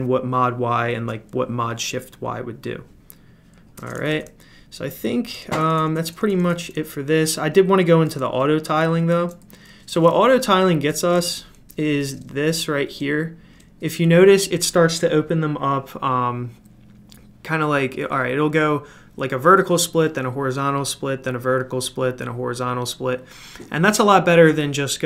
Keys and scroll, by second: 3.7-6.0 typing, 9.1 super+f, 9.1 typing, 11.2 super+Return, 12.1 super+Return, 12.2-13.0 typing, 12.8 super+Return, 13.5 super+Return.